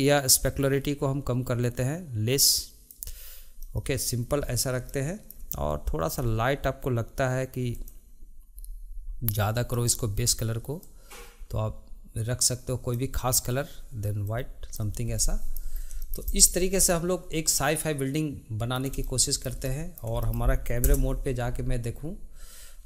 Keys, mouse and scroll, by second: 0.2-3.3 drag, 3.7-4.5 middle drag, 4.5-5.0 scroll up 2, 5.0-6.3 shift+middle drag, 6.3-7.0 scroll up 3, 7.8 click, 9.8 click, 15.3 middle click, 15.8 scroll down 1, 16.1-16.5 shift+middle drag, 16.5 drag, 16.7 scroll up 1, 17.0-21.0 middle drag, 21.0 KP_0.